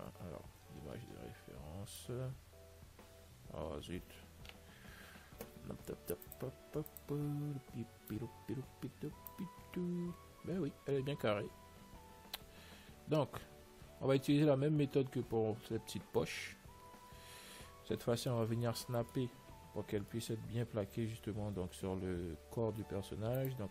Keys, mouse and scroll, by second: 5.2 n, 6.5-10.1 drag, 9.9-16.6 middle drag, 16.8 n, 17.1-23.7 middle drag, 20.8 Tab.